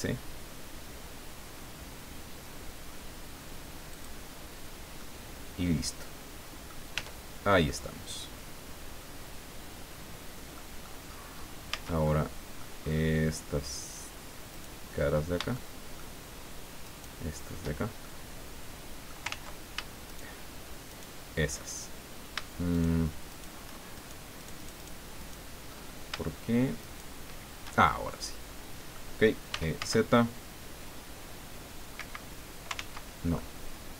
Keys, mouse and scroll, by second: 3.9 click, 4.2-4.8 scroll down 1, 5.0-6.8 drag, 6.9 Tab, 7.3 scroll down 1, 7.7-11.0 drag, 11.7 Tab, 12.0 click, 14.5 right click, 15.0-15.4 scroll up 2, 15.5 shift+click, 16.8 shift+right click, 17.8 shift+scroll down 1, 18.2-19.2 shift+middle drag, 19.3 ctrl+z, 20.1 shift+right click, 20.9 shift+right click, 22.7 shift+right click, 23.3 shift+right click, 24.0 shift+right click, 24.4 shift+right click, 25.2 shift+right click, 25.8-26.1 shift+scroll up 1, 26.8 shift+right click, 27.8 shift+scroll down 1, 28.1-29.1 shift+drag, 29.5 e, 29.8 z, 31.9 Escape, 32.7 ctrl+z, 33.3-33.9 ctrl+drag.